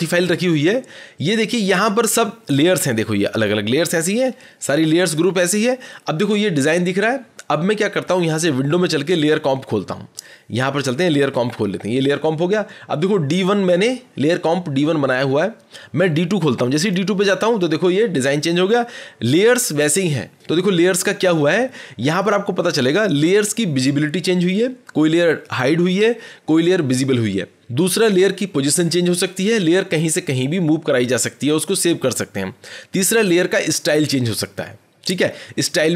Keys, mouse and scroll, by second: 0.2 click, 3.1 scroll, 4.0 scroll, 5.2 scroll, 8.8 click, 11.1 click, 16.8 click.